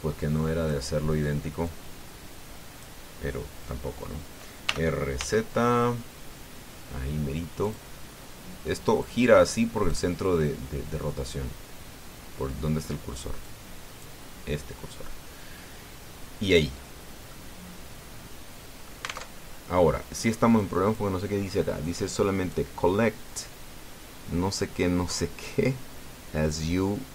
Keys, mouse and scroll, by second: 2.5-3.8 drag, 5.4 r, 6.0 z, 8.4 click, 9.8-10.9 drag, 14.2 click, 17.6 scroll down 2, 18.1-19.8 drag, 20.0 alt+Tab, 21.0-21.3 scroll up 2, 21.4 click, 22.2-22.6 scroll up 2, 22.6 click.